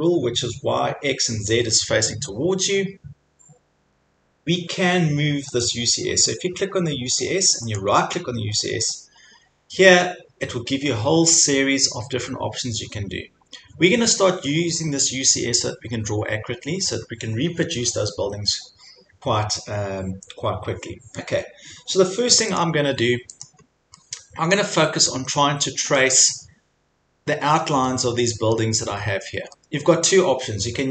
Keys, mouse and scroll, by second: 0.5 scroll down 3, 1.7 scroll up 5, 2.2-2.6 scroll, 5.6 click, 7.8 middle click, 22.6 click, 23.4 click, 23.6-24.1 scroll, 24.6-25.3 scroll, 26.0 scroll, 27.9-28.3 scroll, 28.6 middle click.